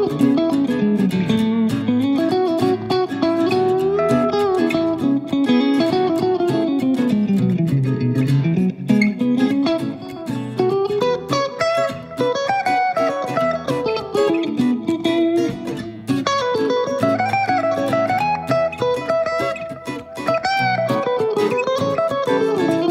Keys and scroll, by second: 22.8 d.